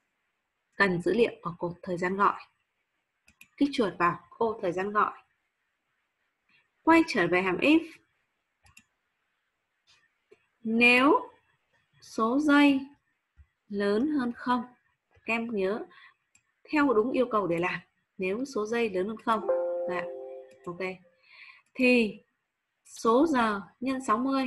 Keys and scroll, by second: 14.3 shift+0.